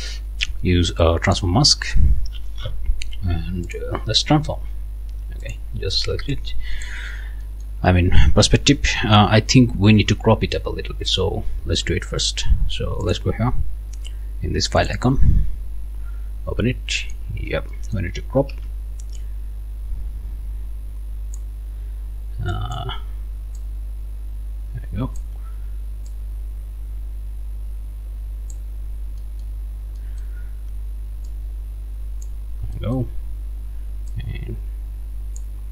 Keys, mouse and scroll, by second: 1.3 click, 3.6 click, 5.4 click, 5.9 click, 6.3 click, 7.3 scroll up 1, 7.4 click, 8.7 scroll down 2, 9.0 click, 11.1 click, 13.0 click, 14.8 click, 16.6 scroll down 2, 17.0 click, 17.4 scroll up 1, 17.7 click, 18.5 c, 22.5 click, 23.6-25.4 drag, 26.1-28.7 drag, 28.9 scroll up 1, 29.2 click, 29.7 scroll up 1, 30.0 click, 30.7 scroll down 1, 31.3-32.4 drag, 32.4 scroll down 1, 32.7 click, 33.2 scroll up 1, 34.1-35.7 drag.